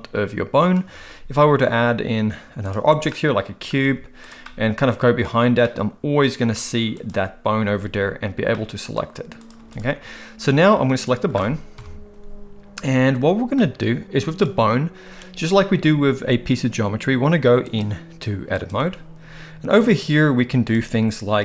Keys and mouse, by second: 1.0 shift+a, 3.1-3.7 middle drag, 3.8 g, 4.4-5.2 middle drag, 5.6-6.5 middle drag, 6.9 click, 8.5-8.9 middle drag, 9.6 x, 11.0 click, 11.7 KP_1, 17.8-18.7 drag, 20.7 click.